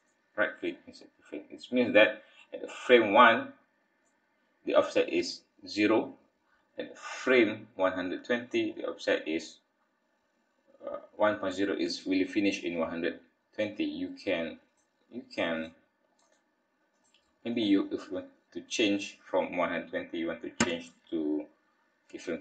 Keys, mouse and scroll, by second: 3.3 click, 7.2 click, 13.7 click, 15.6 click, 16.2 click, 16.9 click, 17.5 click, 20.7 g.